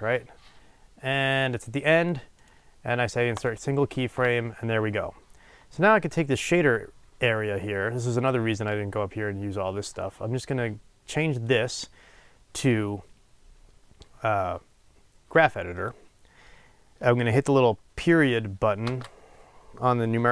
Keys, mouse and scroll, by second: 3.4-20.3 right drag.